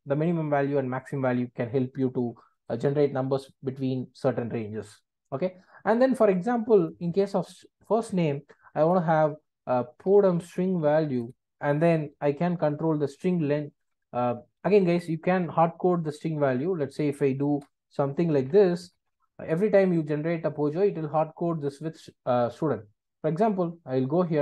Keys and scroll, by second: 11.2 Return.